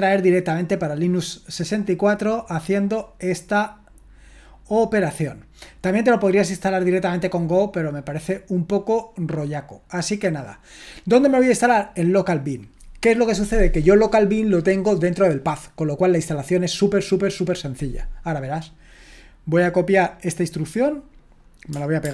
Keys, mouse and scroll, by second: 3.8-4.9 scroll down 1, 4.9-5.5 scroll down 1, 5.5-8.0 scroll down 1, 8.0-10.3 scroll down 1, 10.3-22.1 drag.